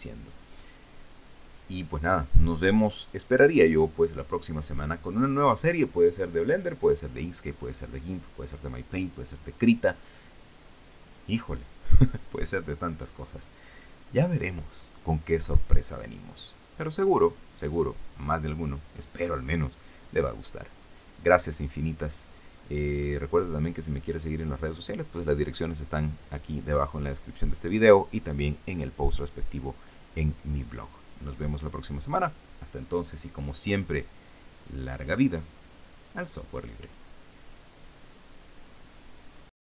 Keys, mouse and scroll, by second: 38.1 click, 39.6 click.